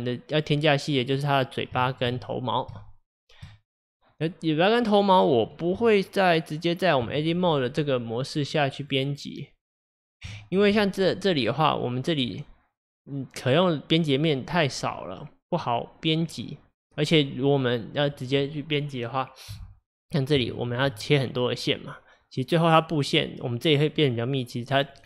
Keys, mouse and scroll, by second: 1.8-5.8 shift+middle drag, 5.8 Tab, 8.8 click, 9.9 click, 10.4-12.4 shift+middle drag, 12.4 click, 13.8-23.6 middle drag.